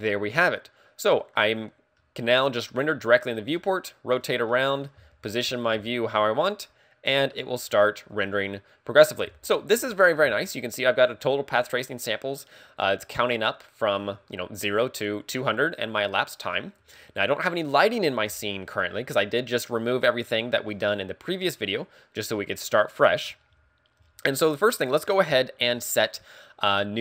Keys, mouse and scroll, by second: 2.0 middle click, 3.7 middle click, 4.5 middle click, 5.0-5.7 scroll up 3, 5.8-6.1 scroll up 2, 6.1 middle click, 7.9 middle click.